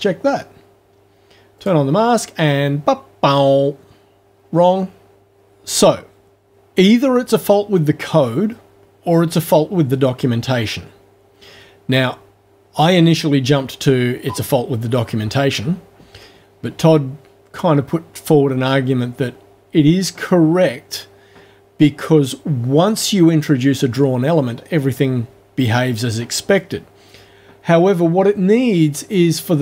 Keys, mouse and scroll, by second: 1.6 click.